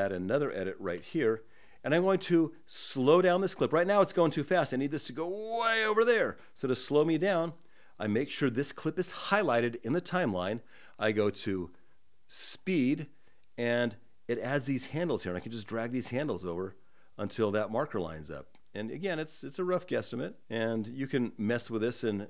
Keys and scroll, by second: 0.6 super+b.